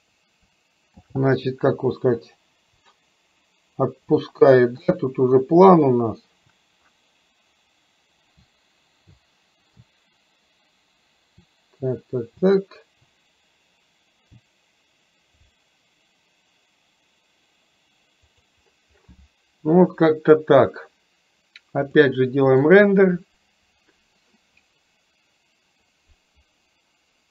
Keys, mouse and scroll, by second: 1.2 shift+f, 22.1-27.3 drag.